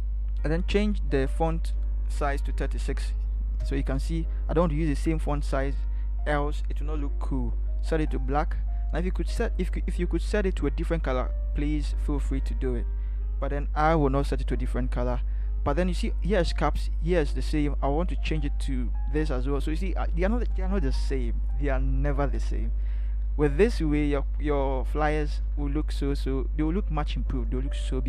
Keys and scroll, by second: 2.5 3, 3.1 6, 3.6 Return, 23.6 Up, 23.8 Up, 24.0 Up, 24.2 Up, 24.7 Up, 25.3 Up.